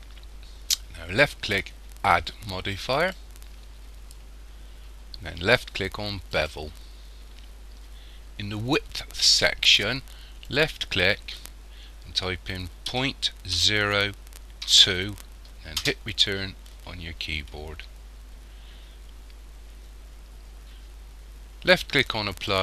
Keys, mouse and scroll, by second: 2.7 click, 10.5 click, 22.1 click.